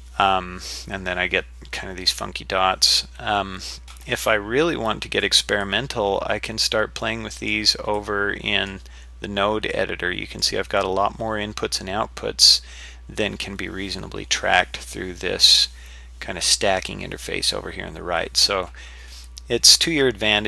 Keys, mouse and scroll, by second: 5.6-7.0 drag, 7.4 click, 8.0 click, 9.7-11.0 drag, 11.0-11.5 scroll down 3, 11.5-12.2 scroll up 1, 12.2 scroll down 1, 12.3-12.8 scroll down 1, 12.8-13.7 scroll up 1.